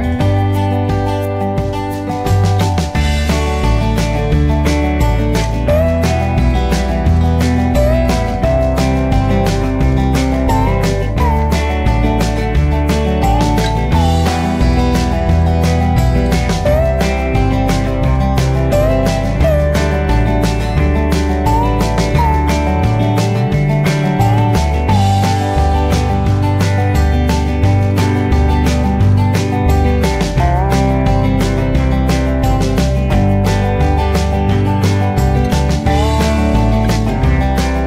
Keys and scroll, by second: 11.2 ctrl+g, 14.1 ctrl+a, 19.2 ctrl+d, 34.1 ctrl+shift+s.